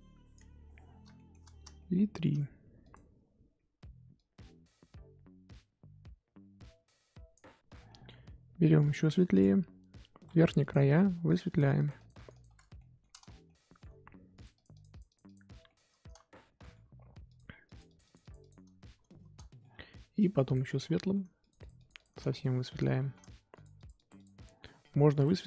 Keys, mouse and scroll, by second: 1.1 shift+middle click, 1.4-1.7 scroll up 1, 1.7-2.8 shift+middle drag, 2.8 click, 3.1 scroll down 2, 3.4-4.1 scroll up 1, 4.1-7.9 drag, 7.9 middle click, 8.1 scroll up 1, 9.4 click, 10.3 f, 11.2-12.7 drag, 12.7-14.3 shift+middle drag, 14.3-15.6 drag, 15.6-17.2 shift+middle drag, 17.2-19.5 drag, 19.5-20.5 shift+middle drag, 20.5 click, 20.9 shift+middle click, 21.4 click, 22.3-23.5 shift+middle drag, 23.5 click, 24.4 shift+middle click, 25.1-25.4 drag.